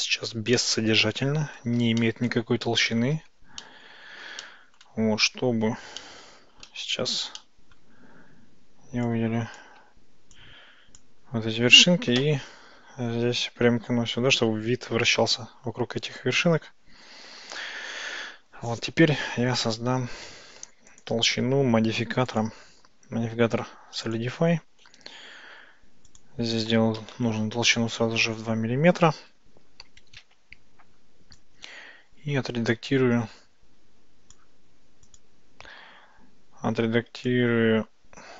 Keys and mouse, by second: 0.6-1.7 ctrl+middle drag, 2.1-3.1 shift+middle drag, 3.7-4.3 ctrl+middle drag, 4.5 ctrl+middle click, 5.2 Tab, 6.1 click, 7.5 shift+click, 9.1 click, 10.5 shift+click, 12.2 KP_Decimal, 14.5-17.5 middle drag, 17.9 Tab, 20.9 click, 22.3-24.3 drag, 26.3-28.0 drag, 31.4-34.5 drag, 35.1 click, 37.4-38.3 drag.